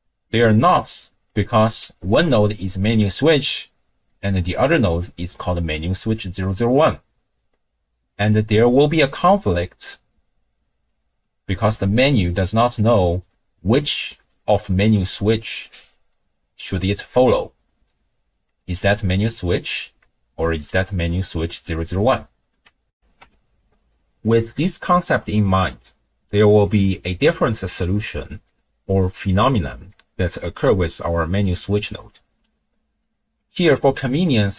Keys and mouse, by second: 1.3 click, 4.1 click, 8.2-8.9 drag, 9.7-10.9 drag, 12.6 click, 18.5 click, 20.6 click, 22.9 ctrl+alt+shift+w, 23.0 ctrl+alt+shift+q, 33.4 click.